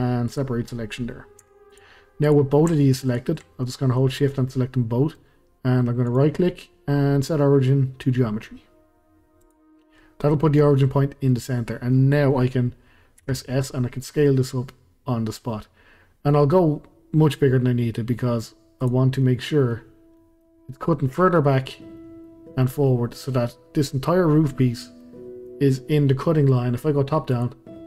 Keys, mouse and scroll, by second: 1.4 Tab, 1.7 drag, 2.2 click, 3.1 shift+click, 3.6-6.1 middle drag, 6.1-9.2 right drag, 9.8-11.5 middle drag, 11.5-11.9 scroll down 2, 11.9-13.2 middle drag, 13.2 s, 19.2-21.7 middle drag, 21.7 scroll down 1, 21.9-25.2 middle drag, 25.2 scroll down 1, 25.4-27.3 middle drag, 27.3 click.